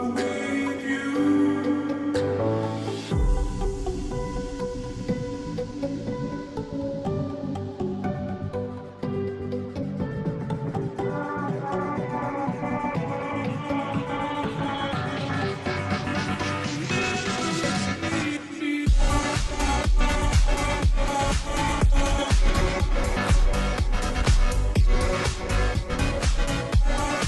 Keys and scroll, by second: 22.5 ctrl+j.